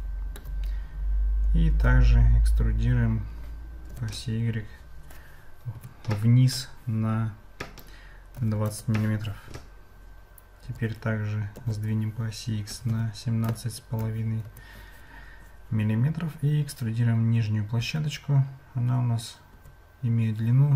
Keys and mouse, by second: 1.7 e, 10.6 g.